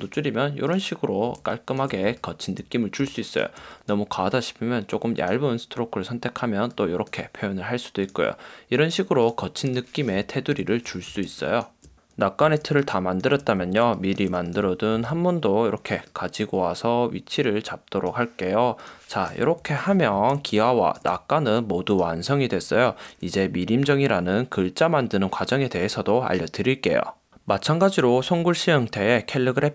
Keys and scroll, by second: 1.5 space, 2.2 space, 10.7 super+0, 11.3 space, 12.5 space, 13.6 space, 15.0 super+v, 19.7 super+0, 20.2 space.